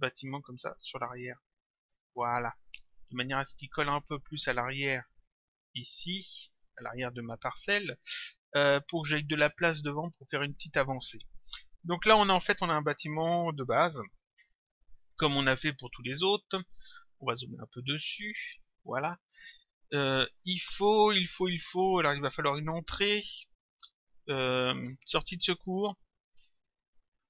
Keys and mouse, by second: 3.0 click, 5.2 click, 8.8 click, 18.1 click, 19.4 click.